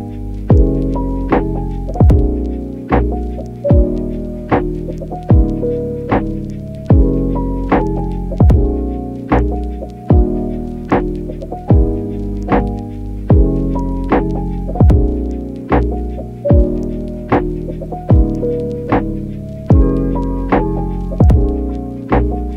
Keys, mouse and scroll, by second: 0.0 click, 1.6 click, 2.2 click, 4.0 click, 5.7 click, 7.0 click, 9.0 click, 9.3 click, 9.8 click, 10.1 click, 10.6 click, 10.8 click, 13.2 click, 13.8 alt+q, 14.8 ctrl+click, 16.4 ctrl+click, 17.8 shift+click, 19.0 middle click, 20.5 shift+click.